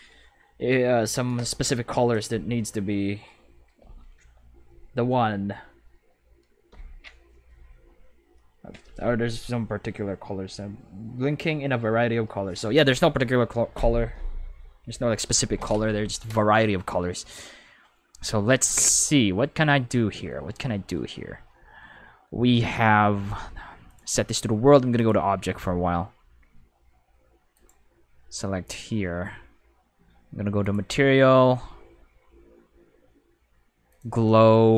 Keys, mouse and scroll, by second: 19.5-20.2 middle drag, 20.3 middle click, 20.7 middle click, 21.2-22.3 middle drag, 22.4 middle click, 23.8 click, 25.0 click, 27.5 right click, 30.6 click, 33.9 click.